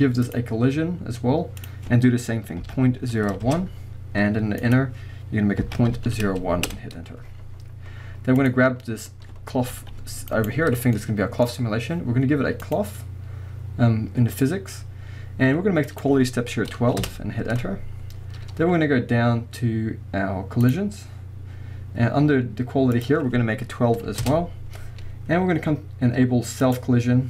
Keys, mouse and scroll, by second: 0.3-8.5 drag, 3.6 Return, 6.7 Return, 7.6-8.4 scroll down 2, 8.8-9.7 scroll up 1, 9.7 g, 10.4 right click, 11.0-12.6 middle drag, 11.8-12.6 scroll down 1, 12.6-26.8 drag, 17.1 Return, 18.1-20.4 scroll down 1, 21.2-22.9 scroll down 1, 24.3 Return.